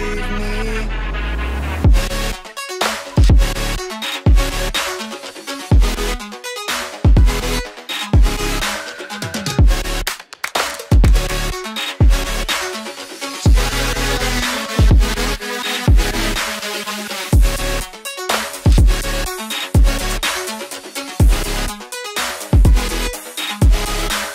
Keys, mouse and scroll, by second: 3.1 shift+Page_Up, 6.7 double click, 8.3 ctrl+k, 18.8 F2, 22.0 space, 23.2 right click.